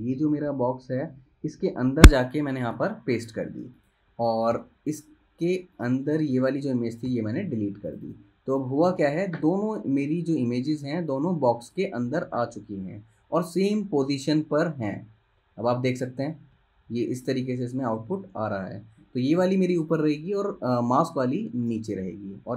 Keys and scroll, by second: 2.8 super+v, 4.7 super+[, 6.5 super+z, 7.2 BackSpace, 9.6 super+z, 12.4 super+z, 14.8 super+[, 16.0 super+], 16.4 super+[, 16.7 super+], 17.0 super+[, 17.3 super+], 17.6 super+[.